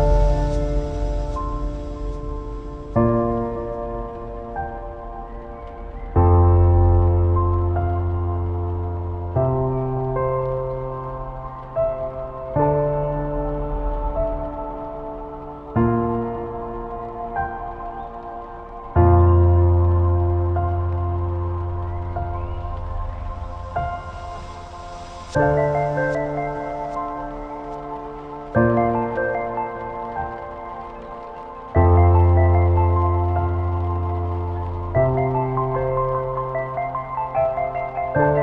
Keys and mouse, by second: 0.0-0.2 typing, 0.0 click, 0.9 shift+click, 1.4 click, 1.5 g, 2.6 click, 2.7 g, 3.6 click, 3.8 g, 4.5 middle click, 5.4-6.6 typing, 7.0 click, 7.4 alt+click, 7.8 middle click, 8.4 alt+shift+click, 8.8 x, 10.2 middle click, 11.5-12.8 middle drag, 13.1 shift+middle click, 14.3 1, 14.8 middle click, 15.3 click, 15.4 g, 17.6 shift+middle click, 18.0 ctrl+z, 20.3-23.7 typing, 20.9 click, 21.8 click, 22.6 click, 23.5 click, 24.7 click, 24.9 g, 26.0 middle click, 26.4 shift+middle click, 27.3 click, 27.6 g, 28.3 click, 28.5 g, 29.1 click, 29.3 g, 29.9 click, 30.0 g, 30.9 click, 31.0 g, 31.8 click, 31.9 g, 33.0 click, 33.8 g, 34.5-35.6 middle drag, 36.2 click, 36.4-38.4 typing, 37.0 click, 37.8 click.